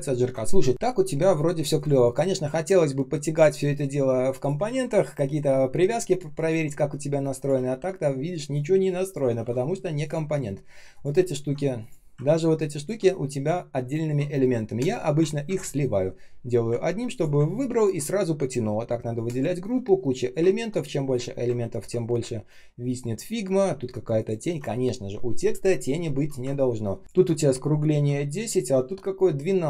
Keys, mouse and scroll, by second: 4.7 ctrl+z, 7.4 ctrl+z, 9.3 ctrl+z, 9.6 ctrl+scroll up 1, 10.2 ctrl+scroll up 1, 11.1 ctrl+scroll down 1, 12.2 ctrl+scroll up 1, 15.4 ctrl+e, 16.8 ctrl+scroll down 1, 17.0 ctrl+click, 17.7 ctrl+click, 20.4 ctrl+scroll down 1, 21.5-22.6 ctrl+scroll up 1, 23.6 ctrl+scroll up 1, 26.4 ctrl+scroll down 1, 26.8 ctrl+scroll up 1, 28.4 ctrl+click.